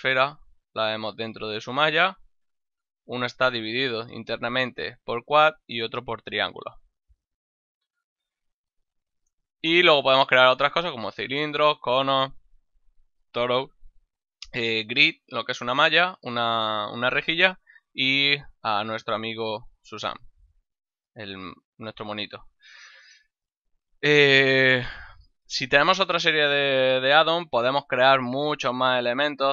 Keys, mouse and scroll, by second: 1.2 middle click, 2.4 middle click, 7.2 ctrl+middle click, 7.8 shift+a, 18.4 click, 19.2 middle click, 20.0 click, 20.9 middle click, 21.6 ctrl+middle click, 23.3 shift+middle click, 24.1 middle click, 24.4 middle click, 27.3 shift+a.